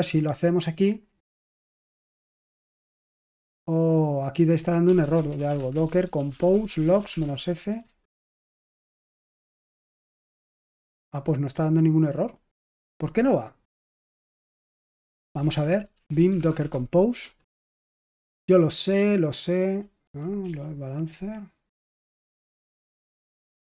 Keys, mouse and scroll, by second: 0.8 click, 2.4 click, 4.3 click, 4.5-7.7 typing, 13.5 click, 15.0 click, 15.3 ctrl+c, 15.6-17.0 typing, 17.1 Return, 18.3-20.3 typing.